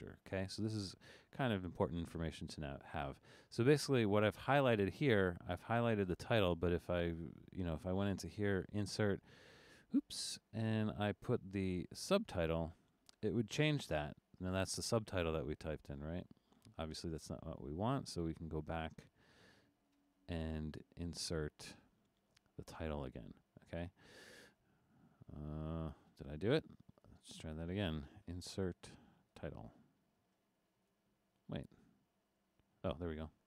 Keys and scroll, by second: 25.5 super+z, 32.1 super+z.